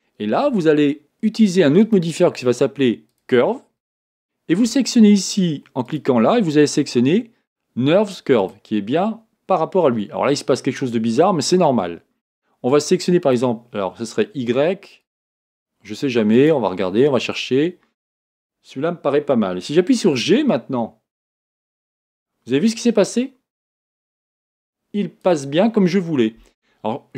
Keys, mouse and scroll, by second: 13.2 click, 15.0 click, 16.4 click, 18.3-18.8 scroll down 2, 18.8-19.7 scroll up 1, 19.7-20.2 scroll up 1, 20.2 g.